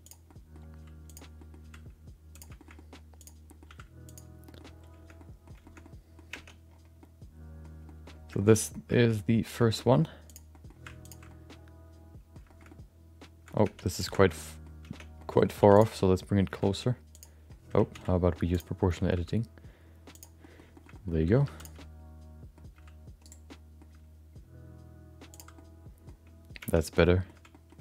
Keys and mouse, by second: 0.0 click, 0.2 middle click, 0.7 g, 1.4 middle click, 1.6 r, 2.5 shift+middle click, 2.7 middle click, 3.2 click, 3.4 middle click, 3.6 s, 4.4 middle click, 5.1 middle click, 5.6 shift+middle click, 5.8 middle click, 6.5 Tab, 7.0 middle click, 7.8 middle click, 8.4 shift+middle click, 8.5 middle click, 9.0 middle click, 9.1 middle click, 9.6 Tab, 9.8 middle click, 10.3 click, 10.5 middle click, 11.0 ctrl+shift+click, 11.3-12.3 middle drag, 12.4 shift+middle click, 12.7 middle click, 13.9 Tab, 14.0 click, 14.3 middle click, 14.8 Tab, 15.1 middle click, 15.6 3, 15.7 click, 15.9 middle click, 16.5 g, 17.9 ctrl+z, 18.5 click, 18.8 middle click, 19.1 g, 20.4 middle click, 20.7 shift+middle click, 20.9 middle click, 21.4 2, 21.6 click, 21.8 middle click, 22.7 g, 23.5 middle click, 23.9 g, 25.5 middle click, 26.9 Tab, 27.0 shift+middle click, 27.5 middle click.